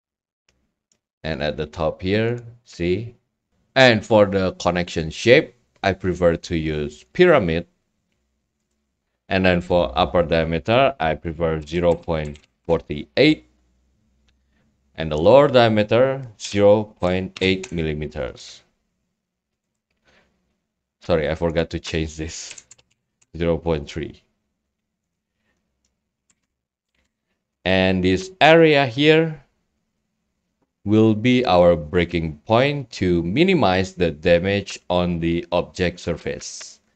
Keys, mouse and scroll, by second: 3.5 click, 4.8 click, 7.2 click, 9.6 click, 15.1 click, 20.2-20.8 drag, 21.5 click, 25.3 click, 25.8-26.3 scroll, 26.1 click, 27.0-27.8 typing, 28.6-29.7 drag, 34.4-36.2 middle drag, 34.4 scroll, 35.0 scroll, 36.2 scroll up 1.